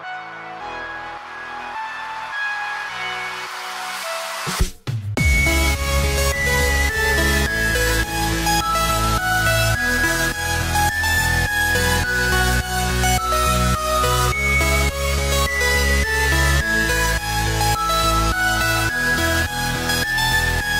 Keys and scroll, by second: 1.5 ctrl+t, 14.0 ctrl+j, 18.9 ctrl+t.